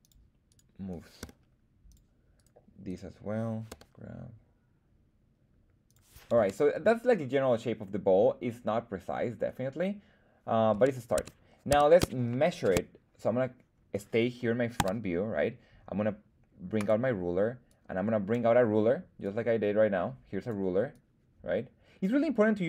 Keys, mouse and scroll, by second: 0.0 click, 0.5 right click, 1.2 g, 1.9 click, 2.3 right click, 2.8 right click, 3.7 g, 5.8 click, 6.3 Tab, 11.1 Tab, 11.7 Tab, 12.3 shift+middle click, 14.7 KP_1, 16.7 click, 17.7 click, 19.2-20.5 drag, 20.9-22.0 drag.